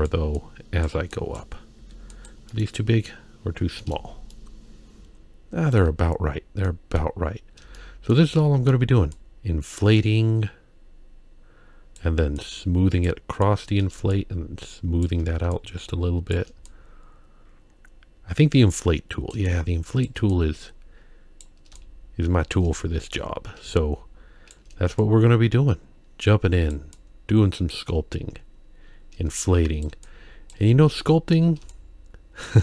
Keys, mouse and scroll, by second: 0.4 click, 1.1 click, 1.8 f, 2.5 middle click, 2.9-3.5 scroll down 3, 3.8 middle click, 4.3-5.7 shift+middle drag, 6.0-6.5 scroll up 3, 6.7 middle click, 7.7 shift+middle click, 8.3 middle click, 9.2-12.0 drag, 12.4 click, 13.5 click, 14.1 shift+click, 15.5 shift+click, 16.6-19.3 drag, 19.5 shift+click, 20.3-21.4 drag, 21.8 shift+click, 23.7 shift+click, 25.0-26.7 drag, 26.9-29.9 drag, 30.1 shift+click, 31.0 middle click, 31.7 shift+click.